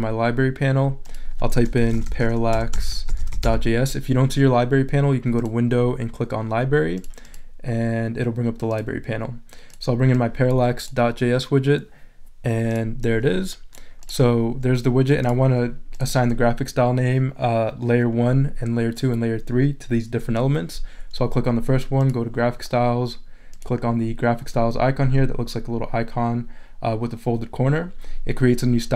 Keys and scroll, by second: 1.5-3.9 typing.